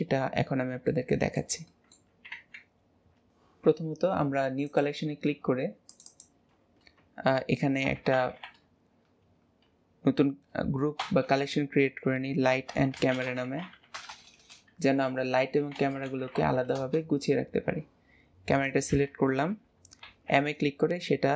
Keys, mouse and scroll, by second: 0.0-0.8 scroll down 1, 0.8-2.4 middle drag, 2.4 ctrl+s, 2.6-2.9 scroll down 2, 4.6-9.2 drag, 14.1 BackSpace, 14.3 BackSpace, 18.5 click, 20.0 m.